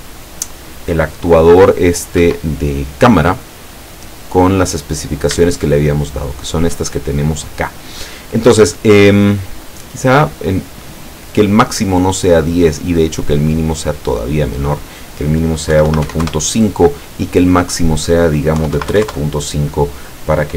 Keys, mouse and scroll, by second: 2.3 Escape, 4.3-4.7 scroll down 2, 5.0 scroll up 2, 5.6 shift+click, 6.4 shift+middle click, 13.4 click, 14.1 click, 14.5 click, 15.8 KP_1, 15.9 KP_Decimal, 16.1 KP_5, 16.3 KP_Enter, 17.6 click, 18.6 KP_3, 18.7 KP_Decimal, 18.9 KP_5, 19.1 KP_Enter.